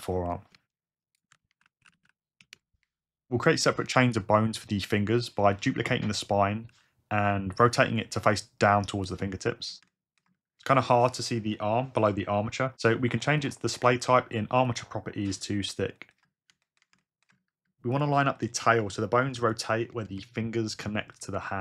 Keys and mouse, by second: 0.0 BackSpace, 0.1 BackSpace, 1.1 click, 1.3 F2, 5.5 shift+d, 6.2 click, 6.7 r, 8.3 click, 8.7 g, 9.1 click, 13.5-14.8 drag, 18.7 g.